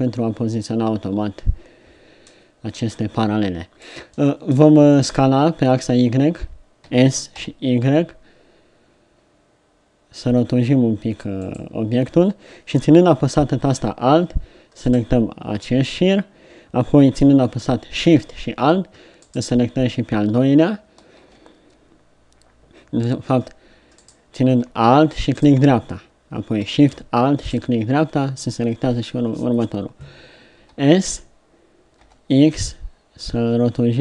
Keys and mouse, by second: 6.9 s, 14.9-24.0 middle drag, 30.6 s.